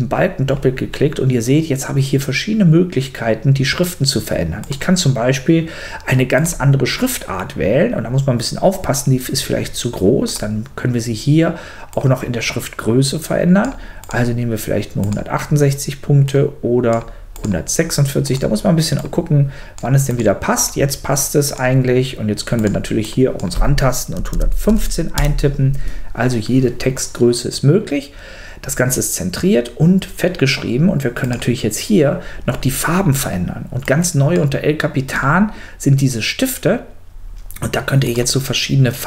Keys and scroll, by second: 24.1 l, 24.7 5, 25.1 Return.